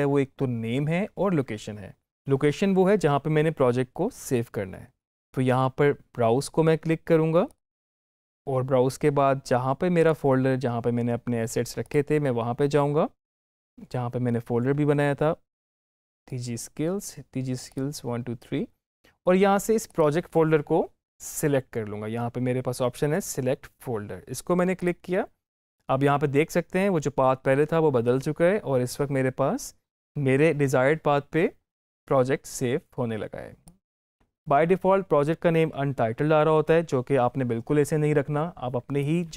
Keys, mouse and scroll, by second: 2.1 click, 7.3 click, 7.3 click, 9.8 click, 13.6-15.1 scroll down 1, 16.0 click, 24.6 click, 33.5 click.